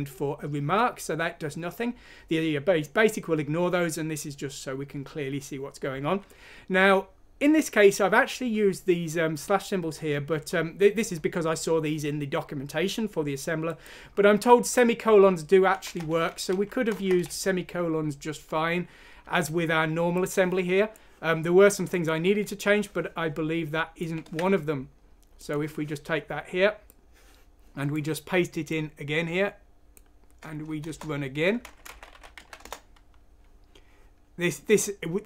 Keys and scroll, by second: 15.8-16.1 typing, 16.5 Down, 17.3 ;, 18.9 typing, 24.2 ctrl+c, 30.8 Return, 31.6-32.9 typing.